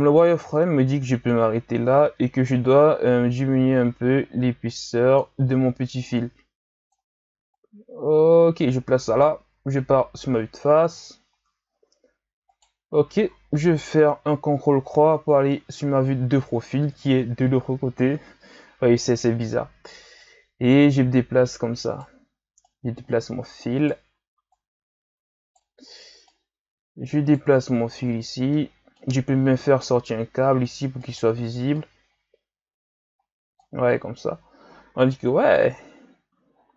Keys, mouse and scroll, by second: 0.2-5.6 drag, 6.1-9.5 drag, 9.5 KP_1, 10.8 z, 11.7-12.5 scroll up 4, 12.5 right click, 14.6 ctrl+KP_3, 17.5-18.0 scroll down 2, 18.0-20.8 scroll up 5, 20.8 right click, 22.6 right click, 24.5 right click, 26.3 right click, 28.5-29.6 middle drag, 29.6-31.0 drag, 31.0 right click, 31.7-34.8 drag, 35.1 KP_1, 36.5-36.7 shift+scroll down 3.